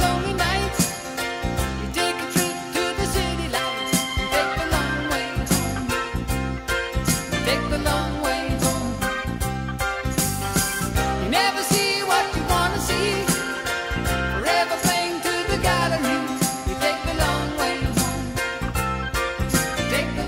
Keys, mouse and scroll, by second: 1.0 shift+click, 1.0 shift+a, 1.5-2.7 middle drag, 4.6 middle click, 5.2-5.7 right drag, 5.7 middle click, 6.3 right click, 11.8 middle click, 14.7-20.2 middle drag.